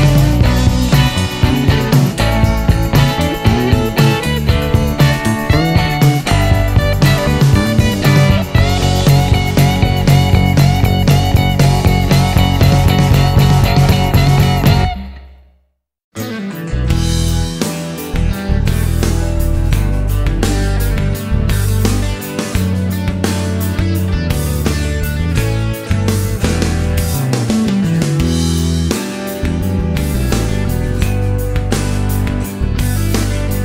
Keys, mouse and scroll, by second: 1.0 click, 2.9 click, 4.1 click, 7.3 click, 9.3-11.3 typing, 11.6 Return, 14.3 click, 15.6-16.1 scroll up 1, 16.2-16.7 scroll up 1, 16.9-17.3 scroll up 1, 17.5 scroll up 1, 17.6-19.1 middle drag, 20.6 click, 25.7 click, 28.5 click, 29.0 click, 30.6 1.